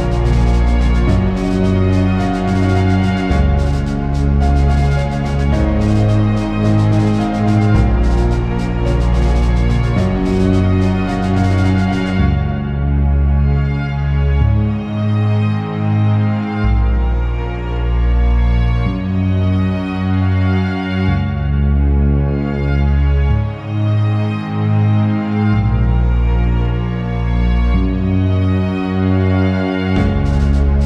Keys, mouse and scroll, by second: 0.0 ctrl+click, 0.4 click, 1.0 ctrl+click, 1.5 ctrl+z, 1.7 ctrl+click, 2.2 ctrl+z, 2.3 click, 2.5-3.9 ctrl+click, 3.9 click, 4.2 click, 4.3 click, 4.4 click, 4.6-5.0 scroll down 3, 5.8 scroll up 2, 5.9 middle click, 6.2 click, 6.8 ctrl+click, 7.9 click, 8.1 middle click, 8.3 click, 8.6 click, 8.9 click, 9.2 click, 9.7 click, 9.9 click, 10.2 shift+click, 10.5 middle click, 10.8 right click, 11.3 click, 11.7 middle click, 12.0 click, 12.3 middle click, 12.6 click, 13.2 click, 13.5 middle click, 13.7 click, 14.3 click, 14.7 middle click, 14.9 click, 15.2 shift+middle click, 15.3 scroll up 1, 15.4 middle click, 15.6 click, 16.1 click, 16.3 click, 16.7 click, 17.2 click, 17.7 click, 18.2 click, 18.5 click, 19.1 click, 19.5 click, 20.0 click, 20.3 click, 20.5 click, 20.8 scroll down 2, 20.9 shift+middle click, 21.0 scroll up 1, 21.1 middle click, 21.3 click, 21.5 click, 22.1 click, 22.1 click, 22.3 middle click, 22.7 click, 22.9 middle click, 23.1 shift+middle click, 23.2 scroll up 1, 23.3 middle click, 23.5 click, 23.8 click, 24.0 click, 24.3 click, 24.5 click, 25.0 click, 25.2 click, 25.6 click, 26.0 click, 26.2 click, 26.5 click, 26.9 click, 27.1 click, 27.3 click, 27.5 click, 27.8 click, 28.1 click, 28.3 click, 28.5 scroll down 1, 28.6 shift+middle click, 28.7 scroll up 1, 28.8 middle click, 29.1 click, 29.4 click, 29.8 click, 30.0 click, 30.2 scroll down 1, 30.3 middle click, 30.7 ctrl+Tab.